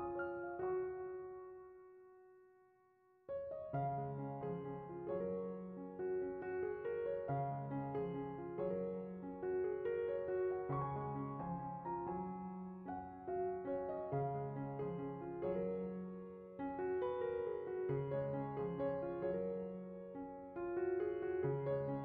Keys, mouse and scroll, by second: 0.8 ctrl+shift+click, 2.2 middle click, 3.1 click, 13.0 click.